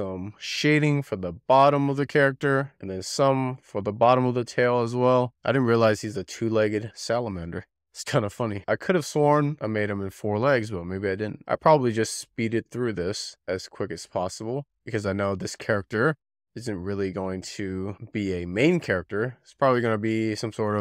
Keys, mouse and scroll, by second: 0.0 Tab, 0.2 scroll up 3, 0.3 middle click, 0.5 shift+click, 0.7 middle click, 0.8 scroll down 1, 1.0 middle click, 1.2 shift+middle click, 1.8 scroll up 2, 1.9 shift+middle click, 2.8 middle click, 3.0-3.5 scroll down 5, 3.2 click, 3.5 shift+middle click, 3.9 shift+middle drag, 4.1-4.6 scroll up 5, 4.1 middle drag, 4.4 middle click, 4.6 shift+middle click, 4.8 scroll down 3, 5.3 alt+middle click.